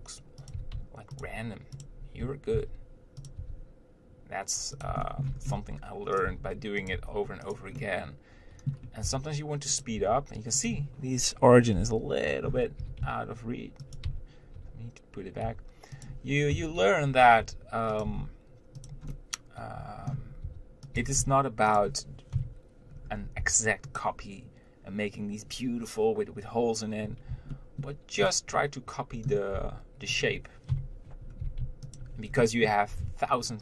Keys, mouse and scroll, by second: 0.0 r, 0.8 g, 2.1 click, 2.8 shift+d, 3.6 r, 5.3 shift+middle click, 5.6 scroll up 1, 5.8 g, 6.5 r, 7.2 g, 8.0-9.4 middle drag, 9.4 r, 10.2 Tab, 10.9 click, 12.0 ctrl+l, 13.2 g, 14.3 Tab, 15.7 g, 17.7 r, 18.3 g, 19.4-20.7 middle drag, 20.7 r, 21.2 g, 23.6 r, 27.8-29.8 shift+middle drag, 29.8 r, 31.7 g, 32.5-33.2 scroll down 1.